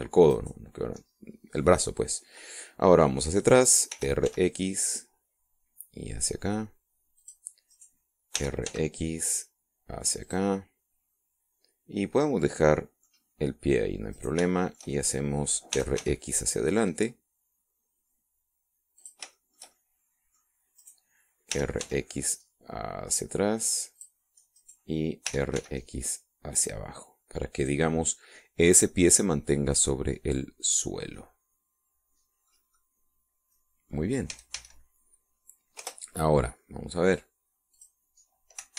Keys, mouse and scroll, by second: 0.3 shift+middle click, 1.4 shift+right click, 5.0 r, 5.4 x, 8.3 click, 8.8 right click, 9.4 r, 9.8 x, 11.4 click, 13.6 middle click, 15.2 shift+right click, 15.6-16.7 shift+middle drag, 16.9 r, 17.1 x, 20.1 shift+click, 20.5-21.6 shift+middle drag, 21.9 right click, 22.6 r, 22.9 x, 25.1 click, 25.7 right click, 26.4 r, 26.7 x, 28.8 click, 29.1 middle click, 29.5-35.2 middle drag, 35.4 a, 36.9 Return.